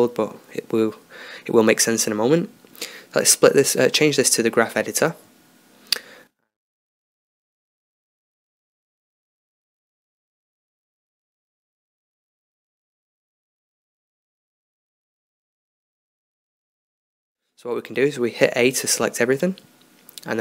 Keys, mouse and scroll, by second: 5.0-15.3 middle drag, 15.3 a, 16.4-20.0 drag, 19.6 a.